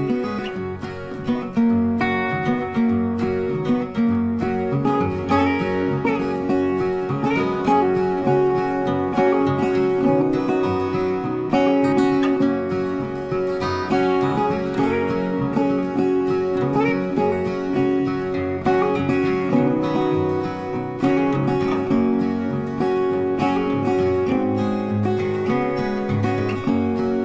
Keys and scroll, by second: 3.4 shift+z, 4.2 space, 4.9 shift+space, 7.2 shift+c, 7.5 shift+e, 8.1 shift+z, 11.7 space.